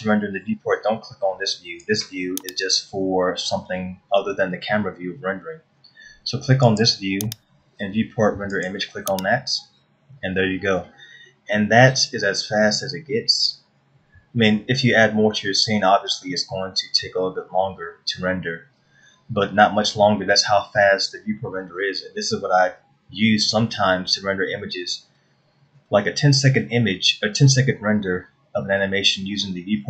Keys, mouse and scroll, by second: 2.5 click, 7.3 click.